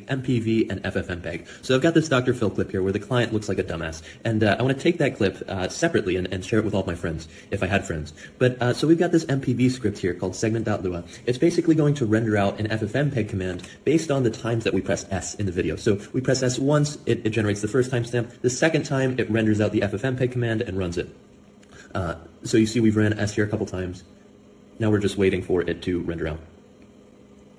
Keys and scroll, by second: 0.5 Down, 1.7 Up, 1.8 Up, 2.0 Up, 6.2 super+j, 7.3 ctrl+g, 7.4 k, 7.5 ctrl+g, 7.6 k, 8.0 ctrl+g, 8.1 k, 8.8 super+h, 9.0 super+h, 9.2 super+h, 9.9-15.2 typing, 15.4 Escape, 16.3 super+l, 16.4 super+l, 16.5 super+l, 16.6 super+l, 16.8 super+l, 16.8 super+k, 19.3 s, 20.7 Right, 20.8 Right, 21.5 space, 22.6 super+j, 22.8-25.2 typing, 25.1 ctrl+g, 25.7 ctrl+g, 26.3 Escape, 27.1 super+j, 27.1 Return, 27.1 Escape, 27.1 ctrl+c, 27.1 typing, 27.2 Tab, 27.2 ctrl+n.